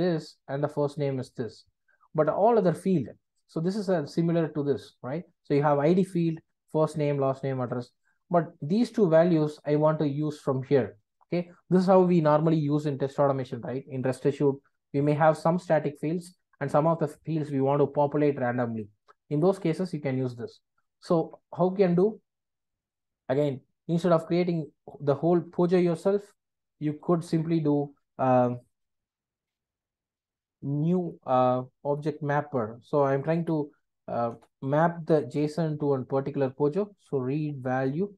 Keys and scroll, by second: 34.3 Return.